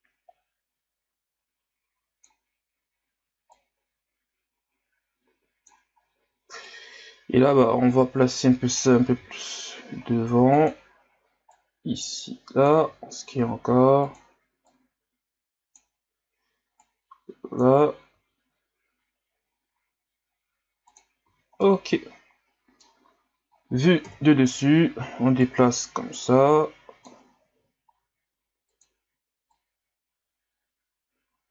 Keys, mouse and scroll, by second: 3.6-9.1 drag, 9.1 s, 11.5-12.8 drag, 12.8 s, 14.7-18.1 drag, 18.1 s, 21.6-24.0 middle drag, 24.0 KP_7, 25.4-27.4 drag, 27.4 s, 29.5-31.5 drag.